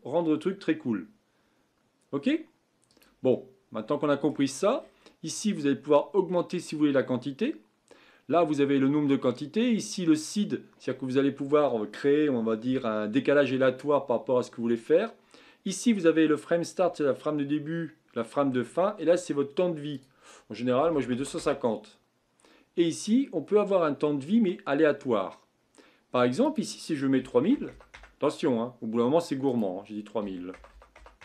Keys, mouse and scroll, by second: 3.1 drag, 3.3-4.8 middle drag, 4.8-7.8 scroll up 16, 19.9-23.0 drag, 26.4-27.7 drag, 27.7 KP_0, 29.5-30.7 drag, 30.7 KP_0.